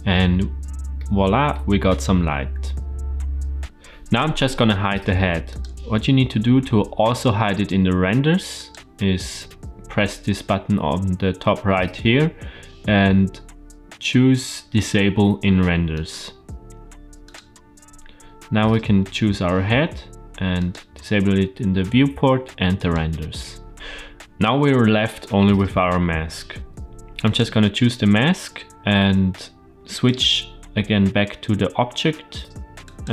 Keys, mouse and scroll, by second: 0.9-1.5 middle drag, 2.0 shift+scroll down 3, 5.4 click, 8.5-17.3 drag, 20.5 click, 22.7 click, 23.5 scroll up 1, 25.8-27.2 scroll down 2, 27.2 click, 29.9-32.9 drag.